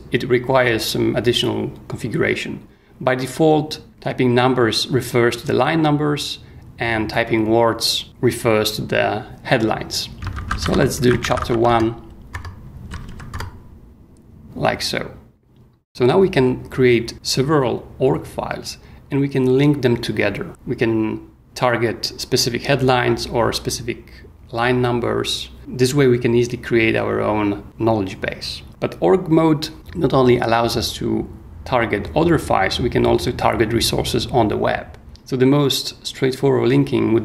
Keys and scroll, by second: 10.1-12.9 typing, 13.3 Return, 28.7 space.